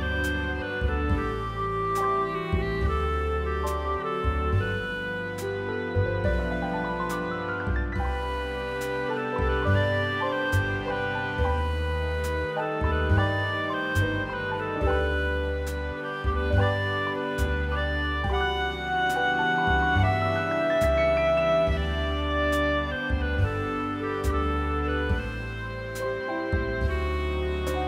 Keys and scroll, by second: 0.0-0.2 typing, 10.7 space, 13.9 Escape, 17.2 2, 18.8 3, 21.6 Escape, 25.0 4.